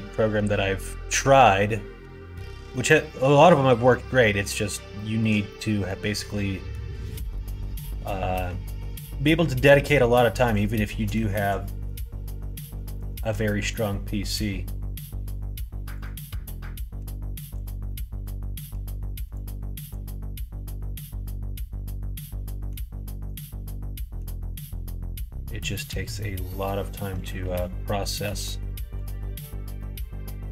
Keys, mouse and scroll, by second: 1.9 g, 3.8 middle click, 4.9 shift+middle click, 5.4 middle click, 6.1 middle click, 7.0 scroll up 1, 7.1 middle click, 7.3 scroll down 1, 7.8 middle click, 8.0 scroll down 1, 8.2 scroll up 1, 8.3 middle click, 8.4 scroll down 1, 8.7 middle click, 9.6 middle click, 10.1 middle click, 11.1 middle click, 11.6 shift+middle click, 12.9 shift+middle click, 13.6-15.6 middle drag, 15.9 click, 16.2 middle click, 17.5 click, 17.8 middle click, 19.3 click, 20.1 middle click, 20.7-22.7 middle drag, 23.2 click, 23.5 middle click, 24.9 middle click, 26.1 click, 27.4 ctrl+z, 28.2 g, 29.7 middle click, 30.2 middle click, 30.3 right click.